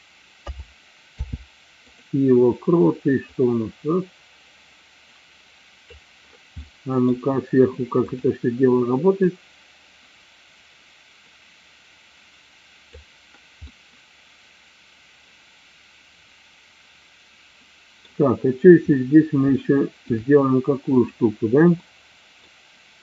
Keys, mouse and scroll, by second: 0.4 a, 1.2 i, 3.3-6.1 drag, 6.8-7.2 middle drag, 8.2 click, 9.3-13.1 drag, 13.7-18.2 middle drag, 19.7-20.1 shift+middle drag, 20.9 click, 21.9 middle click.